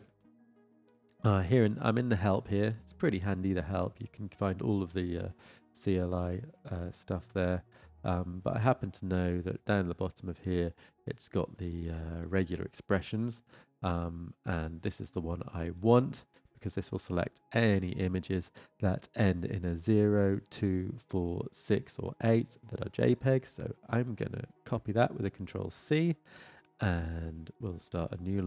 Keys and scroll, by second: 25.3 ctrl+c.